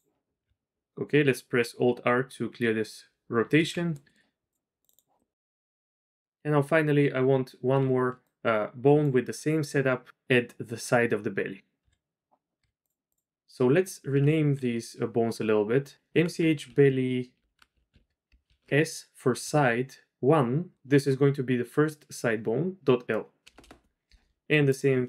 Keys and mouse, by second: 3.4 alt+r, 4.0 click, 4.8 click, 5.3 shift+click, 7.8-10.1 d, 8.2-10.1 drag, 11.8 q, 12.6 q, 13.1 click, 14.1 F2, 16.2 Left, 23.6 Return.